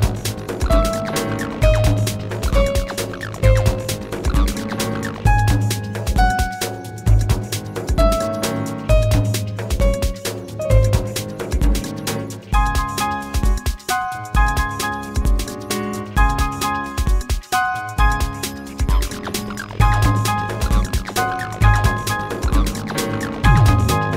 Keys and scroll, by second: 14.6 space, 16.8 space, 21.1 ctrl+z.